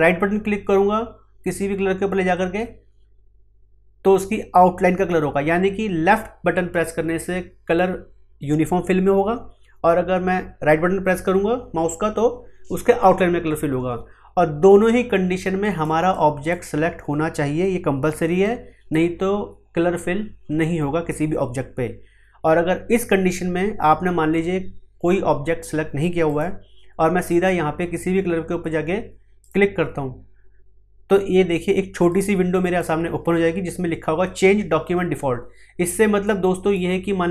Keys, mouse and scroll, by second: 2.3 right click, 15.6-26.2 drag, 29.4 click, 32.1-36.2 drag, 36.2-37.3 drag.